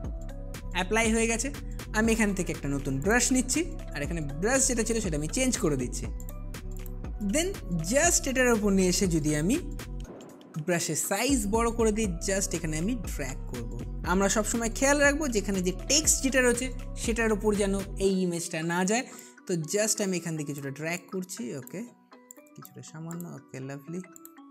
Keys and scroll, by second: 10.0-11.4 typing.